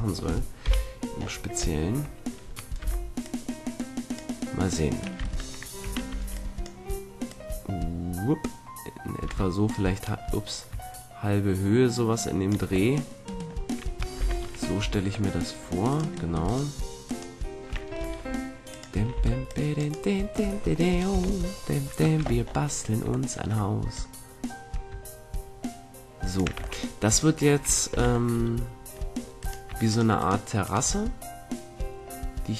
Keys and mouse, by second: 0.6 KP_1, 1.1-2.7 middle drag, 2.7 z, 3.2-5.0 drag, 5.1 Tab, 5.8 a, 6.1 b, 7.2-8.9 drag, 12.8 middle click, 14.1 z, 14.8 a, 15.8-17.6 middle drag, 18.0 ctrl+Tab, 19.1 c, 21.0 KP_3, 22.1 z, 22.4 middle click, 23.8-25.1 drag, 25.6 click, 26.5 a, 26.8 middle click, 27.8 z, 29.3-32.4 middle drag.